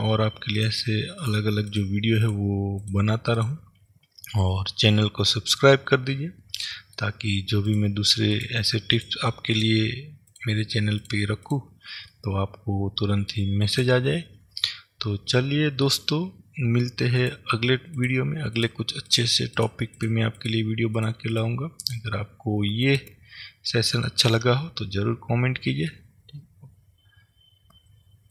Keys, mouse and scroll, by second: 0.7 click, 1.4 click, 1.8 click, 2.4 click, 2.9 click, 3.5 click, 5.2-7.7 middle drag, 7.7 click, 8.4 click, 9.0 click, 9.7 click, 10.4 click, 11.1 click, 11.6 click, 12.2-13.8 middle drag, 13.8 click, 14.8-17.3 middle drag, 17.3 click, 18.1 click, 18.7 click, 19.2 click, 19.7 click, 20.1 click, 20.5 click, 21.1 click, 21.4 click, 21.9 click, 24.1-28.3 middle drag.